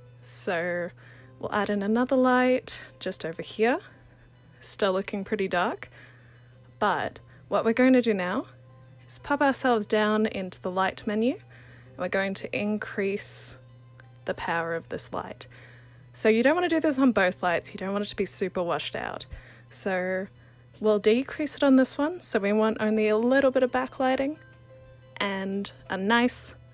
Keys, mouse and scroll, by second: 1.7 ctrl+d, 5.8-8.3 alt+drag, 9.7 click, 12.7 click, 14.0-15.7 drag, 15.7 0, 22.2 click, 24.8-26.3 drag, 26.3 0.